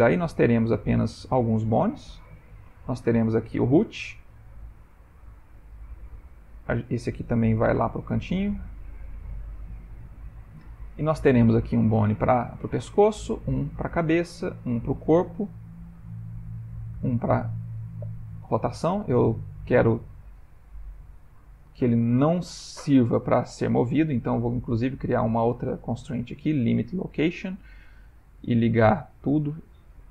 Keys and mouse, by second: 0.2 click, 0.9 ctrl+middle click, 1.5 middle click, 3.4 click, 3.9 g, 5.5 click, 6.5 click, 7.6 m, 9.5 middle click, 9.5 middle click, 11.3 click, 11.7 middle click, 12.5 middle click, 13.2 click, 14.3 click, 14.5 g, 16.5 click, 16.8 g, 18.3 r, 21.1 shift+middle click, 22.1 shift+middle click, 24.6 click, 25.7 click, 29.3 click, 29.9 click.